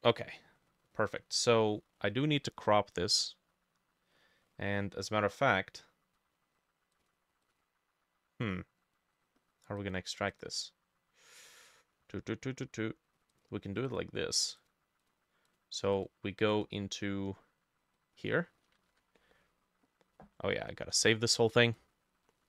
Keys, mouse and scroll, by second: 0.7 scroll up 1, 0.9 middle click, 1.1-1.7 scroll down 1, 1.7 middle click, 15.1 double click, 16.0-18.0 drag, 18.8-20.9 ctrl+drag, 18.9 ctrl+s, 21.7-22.4 drag.